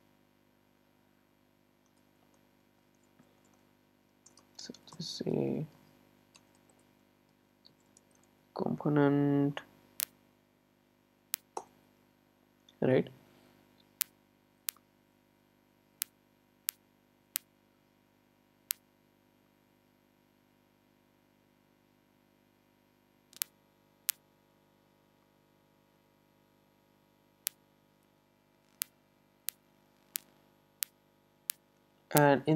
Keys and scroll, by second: 11.7 Return.